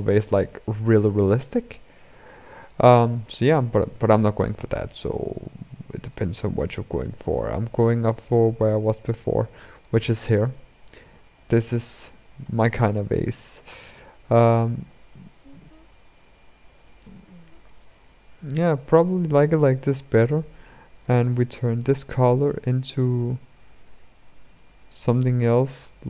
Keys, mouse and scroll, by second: 3.0 ctrl+z, 6.1-9.1 drag, 9.3-9.9 shift+middle drag, 9.9-10.7 scroll up 6, 10.7-11.4 middle drag, 11.4-12.8 scroll down 12, 14.4 scroll down 1, 14.4-17.7 drag, 17.7-18.7 scroll up 6, 18.7-20.8 shift+middle drag, 20.8-22.3 drag.